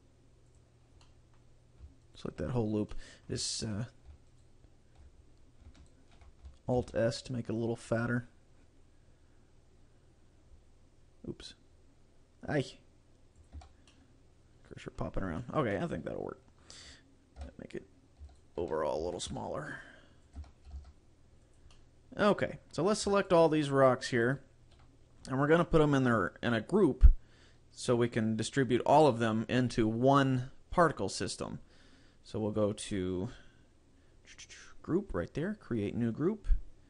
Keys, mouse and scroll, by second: 1.1 middle click, 2.1 alt+right click, 2.6-3.0 scroll up 4, 3.0 middle click, 3.6 shift+middle click, 4.4 alt+right click, 5.9 alt+shift+right click, 6.9 alt+s, 13.6 click, 13.7 Tab, 14.0 middle click, 15.1 scroll down 2, 15.5 shift+middle click, 15.8 middle click, 17.5 Tab, 18.3 a, 18.4 right click, 18.6 a, 19.1 a, 19.4 s, 20.5 Tab, 20.5 click, 20.8 g, 21.6 click, 21.8 middle click, 23.5 shift+right click, 23.8 shift+right click, 24.5 shift+right click.